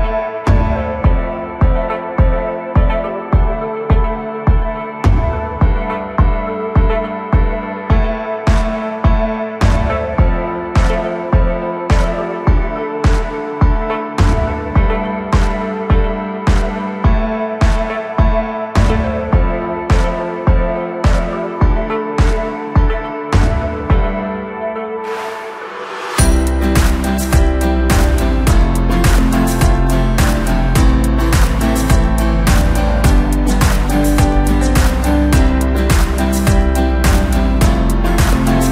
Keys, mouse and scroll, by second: 0.6 drag, 1.2 click, 2.1-4.0 drag, 4.2 scroll down 2, 4.4-6.8 middle drag, 6.8 KP_7, 7.3 KP_1, 8.2-8.8 scroll up 1, 8.8 ctrl+KP_3, 9.8 KP_1, 11.1 scroll up 1, 11.2 scroll down 2, 11.4-13.0 middle drag, 13.0-13.4 scroll up 1, 14.7 click, 15.0-15.7 scroll down 12, 17.6-17.9 drag, 17.9-19.3 scroll down 3, 19.3-21.6 drag, 21.6-22.4 scroll down 1, 22.4 click, 23.3 drag, 23.5-25.0 scroll down 1, 25.0 scroll down 1, 25.2-27.4 drag, 27.4-34.1 middle drag, 34.1 KP_1, 34.7 scroll down 3, 35.0-35.9 middle drag, 35.9-37.1 scroll up 2, 37.1 ctrl+alt+KP_0, 38.5 click.